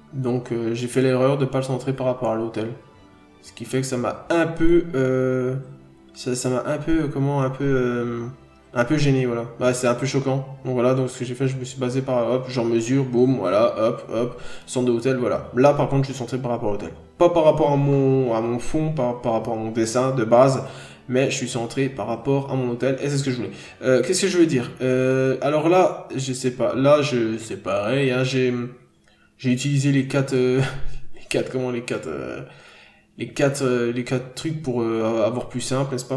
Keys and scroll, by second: 0.6 ctrl+z, 4.7 scroll up 1, 4.9 n, 6.6 ctrl+z, 7.1 ctrl+z, 7.9 n, 8.1-8.5 scroll down 1, 9.9 ctrl+z, 10.1-10.8 scroll up 1, 14.4 n, 14.6-15.0 scroll down 1, 17.7 ctrl+z, 20.3 ctrl+z, 23.4 ctrl+z.